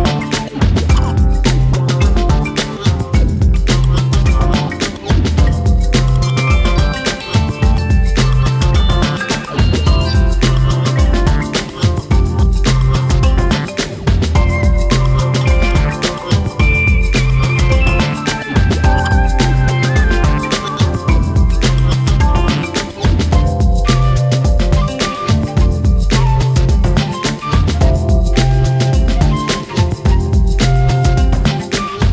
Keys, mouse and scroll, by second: 0.3-1.3 scroll up 1, 1.6 click, 2.5-3.5 drag, 3.7 drag, 4.7-6.2 shift+middle drag, 7.0 scroll up 1, 7.2-7.6 shift+middle drag, 7.6 click, 8.7-9.1 drag, 9.3-11.3 drag, 11.9-13.5 drag, 13.8 click, 14.1 click, 14.9-15.9 drag, 17.6-18.6 drag, 18.7-19.3 right drag, 19.3 click, 19.7 click, 20.2 drag, 20.9 click, 21.6 click, 21.8 scroll down 2, 22.0-23.2 shift+middle drag, 23.3-23.7 drag, 24.2 ctrl+l, 27.5-28.0 right drag, 28.0 drag, 28.5-29.2 middle drag, 29.2-29.6 scroll up 2, 29.6 scroll down 1, 29.8-30.7 middle drag, 30.7-31.8 drag.